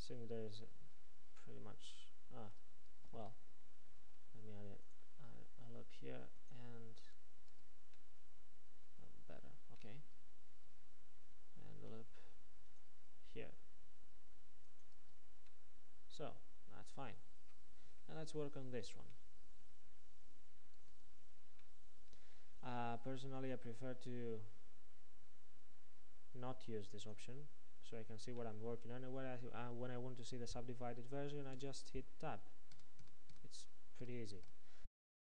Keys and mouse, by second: 1.4 Tab, 2.5 Tab, 3.2 Tab, 4.0 ctrl+r, 8.0 Tab, 10.5 Tab, 11.8 ctrl+r, 15.1 Tab, 20.9 Tab, 27.1-28.5 drag, 28.5-31.7 middle drag, 31.7 Tab, 32.8 Tab, 33.1 Tab, 33.4 Tab, 34.1 Tab, 34.5 Tab, 35.0-35.2 drag.